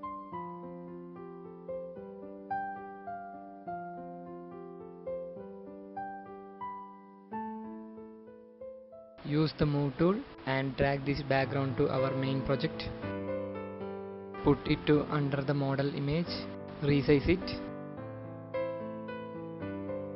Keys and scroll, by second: 1.4 space, 3.4 ctrl+0, 7.1-7.6 typing, 16.2 ctrl+t.